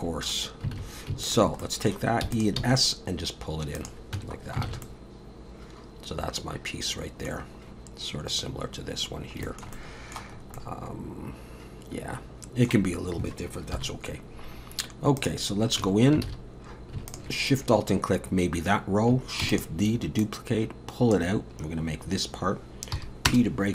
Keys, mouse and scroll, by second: 0.8 alt+a, 1.2 alt+shift+click, 1.6 middle click, 2.2 e, 2.6 s, 4.2 Tab, 4.4 scroll down 3, 4.7 alt+a, 4.8 middle click, 7.4-7.7 scroll down 2, 8.3 scroll up 1, 9.1-9.4 scroll down 1, 9.5 shift+middle click, 9.7 middle click, 10.4 scroll up 2, 10.6 middle click, 12.9-13.7 scroll down 1, 13.7 KP_7, 15.2 click, 15.5 scroll up 4, 15.8 Tab, 16.3 alt+a, 17.1 alt+shift+click, 17.6 scroll down 1, 19.4 shift+d, 20.2 click, 22.9 p.